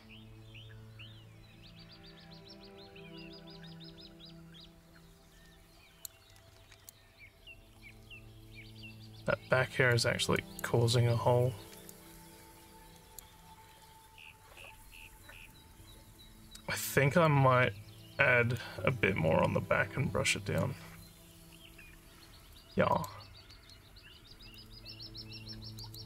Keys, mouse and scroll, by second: 6.9-9.9 alt+drag, 10.4 alt+click, 11.8-13.1 alt+drag, 15.6-17.2 alt+drag, 18.5-20.5 alt+drag, 22.9 click, 24.5 click, 25.7 click.